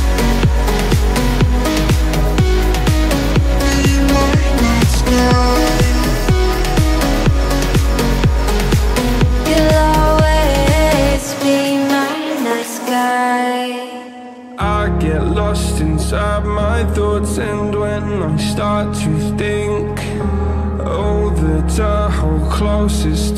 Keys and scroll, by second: 0.5 5.